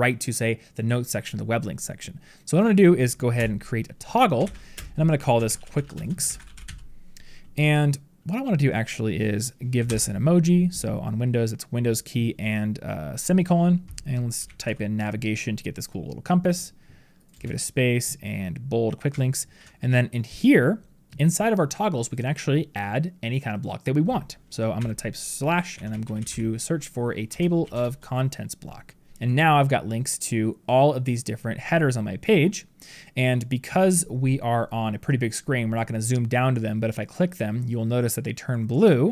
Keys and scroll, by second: 9.8 super+;, 19.3 ctrl+b.